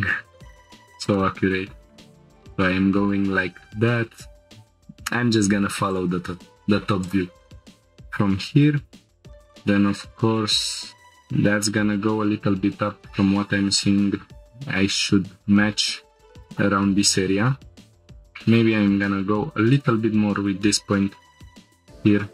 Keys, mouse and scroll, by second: 0.2 x, 1.0 click, 3.6 g, 4.2 x, 5.9-7.1 drag, 7.7 shift+middle click, 8.0-8.4 scroll up 3, 9.2 click, 9.2 scroll down 2, 9.3 scroll up 1, 9.5-10.0 scroll down 3, 10.7-11.0 scroll up 4, 10.9 click, 11.5 ctrl+click, 12.1 scroll down 1, 13.5 scroll down 1, 14.4 g, 14.6 z, 16.5-17.9 drag, 18.1 scroll up 1, 18.1 g, 18.8 x, 19.7 shift+click.